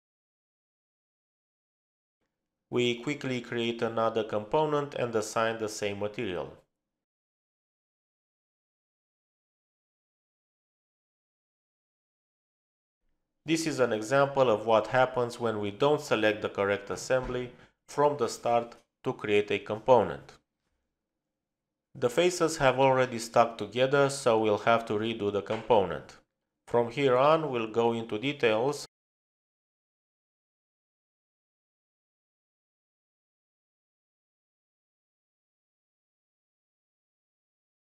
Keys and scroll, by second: 20.8 ctrl+z, 22.2 ctrl+z, 30.1-31.6 typing, 32.1 Return, 33.4-34.2 typing.